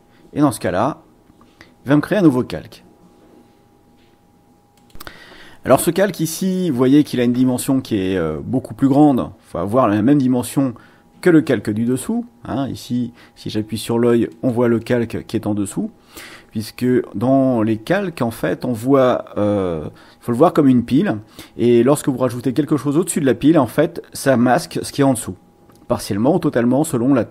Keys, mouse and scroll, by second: 4.7 click, 11.8 click, 14.3 click, 14.8 click.